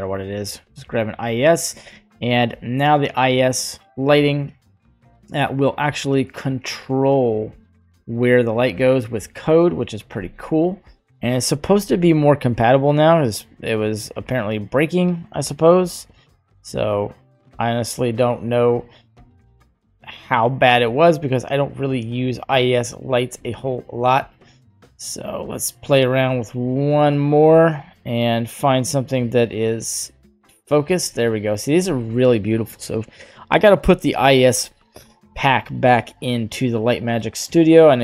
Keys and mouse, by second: 1.2 middle click, 16.1-18.1 drag, 19.2 drag, 36.7 click.